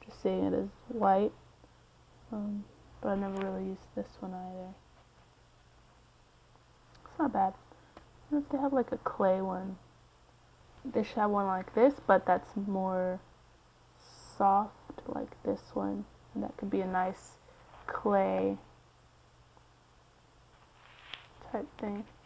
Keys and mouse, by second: 0.0-1.3 middle drag, 2.3-4.4 drag, 5.1-10.5 middle drag, 10.5-13.2 drag.